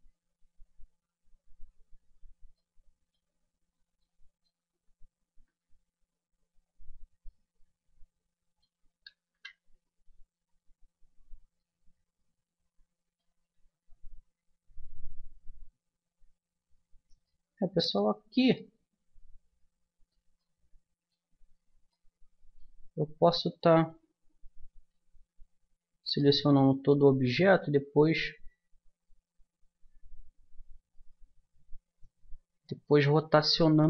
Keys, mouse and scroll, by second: 0.8-2.6 middle drag, 2.7-5.4 middle drag, 5.4 KP_1, 6.5-7.6 middle drag, 9.3 KP_1, 10.4-11.6 middle drag, 13.6 Tab, 15.6 Tab, 20.4-25.0 middle drag, 26.2-27.5 middle drag.